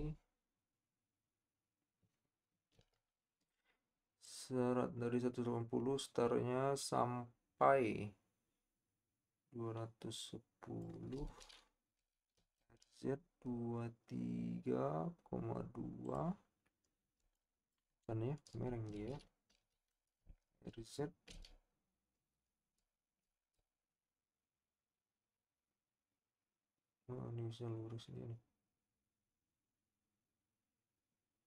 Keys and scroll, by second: 2.9 i, 12.2 r, 12.4 z, 19.5 r, 20.2 shift+r, 21.3 z.